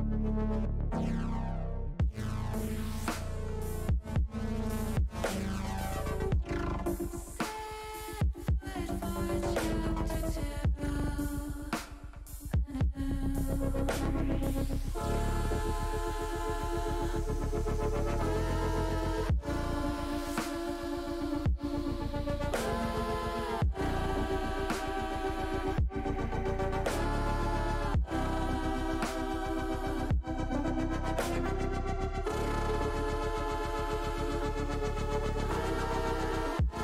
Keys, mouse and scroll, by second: 0.0 middle click, 0.4 middle click, 1.0 shift+middle click, 2.9 shift+middle click, 4.1 shift+middle click, 7.0 click, 8.5 click, 11.2 Tab, 11.6 middle click, 13.0 shift+click, 13.4 shift+click, 15.9-17.5 drag, 22.3 middle click, 23.1 shift+middle click, 26.0 click, 26.7 click, 28.9 click, 30.8 ctrl+r, 33.6 click, 36.6 ctrl+r.